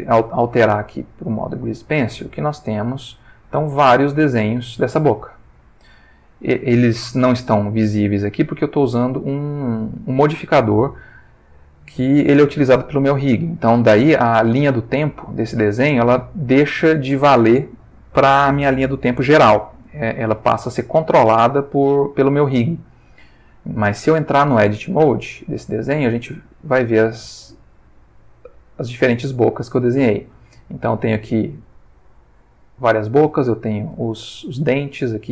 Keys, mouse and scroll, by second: 0.9 click, 2.9-4.3 drag, 4.6-12.5 drag, 14.6-20.9 drag, 25.0 Tab, 26.1-33.3 drag, 34.4-35.0 ctrl+middle drag.